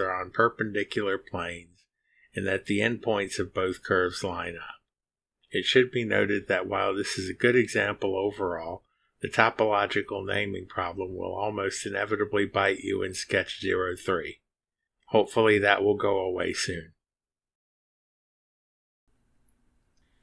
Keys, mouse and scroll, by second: 2.8-4.4 drag, 4.7 click.